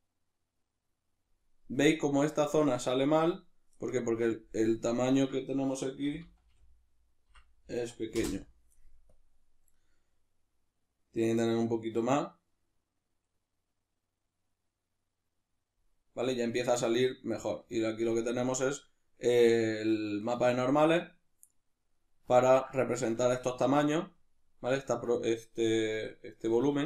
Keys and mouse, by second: 8.3 Return, 17.7-26.8 ctrl+middle drag.